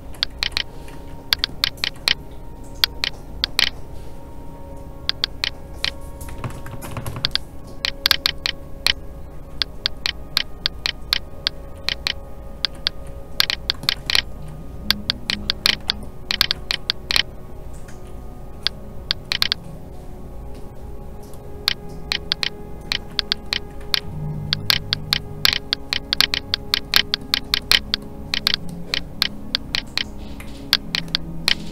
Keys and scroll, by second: 0.9 ctrl+z, 7.9 Escape, 17.8 alt+a, 23.8 alt+a, 30.4 alt+a.